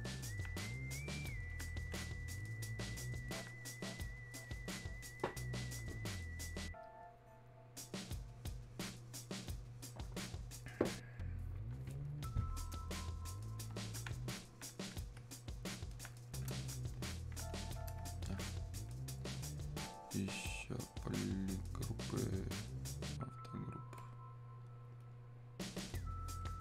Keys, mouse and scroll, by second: 12.7-16.8 drag, 16.8-19.8 ctrl+shift+drag, 23.3 shift+click.